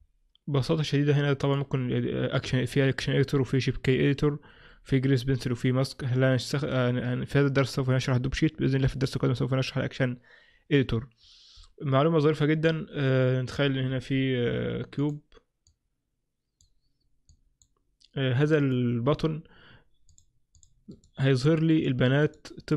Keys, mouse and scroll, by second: 1.5 click, 14.0 shift+a, 15.7 click, 17.3 click, 20.2 click, 20.7 click, 21.0 right click, 21.8 right click, 22.3 right click.